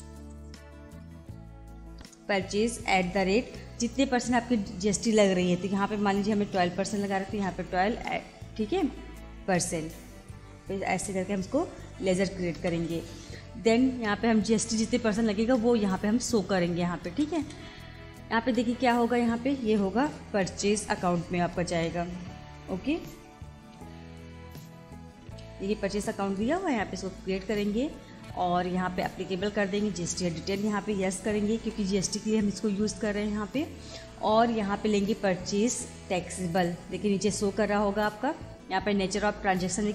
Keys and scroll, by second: 0.0-2.9 typing, 6.2 1, 7.0 2, 12.1 shift+5, 17.0 Return, 20.8 Up, 22.4 Down, 23.6 Up, 24.9 Down, 26.5 Return, 28.3 Return, 29.9 Return, 31.0 y, 31.6 Return, 32.9 Return, 34.7 Down.